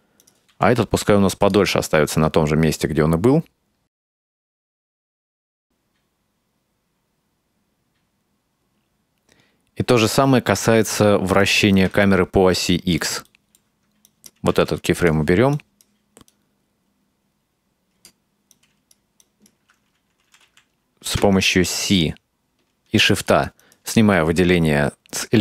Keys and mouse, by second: 0.2 right click, 0.5 s, 2.2-10.2 drag, 11.4 right click, 12.1-13.1 ctrl+middle drag, 13.4 shift+middle click, 14.1 right drag, 14.5 x, 15.6 right drag, 16.3-18.1 drag, 18.5-19.1 right drag, 19.2-19.6 right drag, 20.5 c.